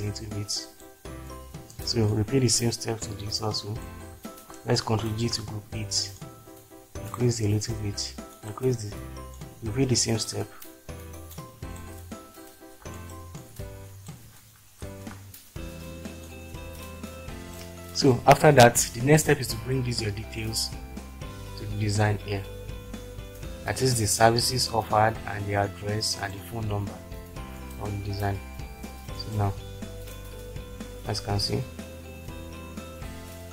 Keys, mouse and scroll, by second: 2.8 click, 3.2 click, 5.3 ctrl+g, 6.2-7.2 drag, 11.3 click, 14.9 ctrl+g, 21.4 click, 22.2 middle click, 22.3 click, 23.7 click, 24.1-26.5 drag, 29.4 click.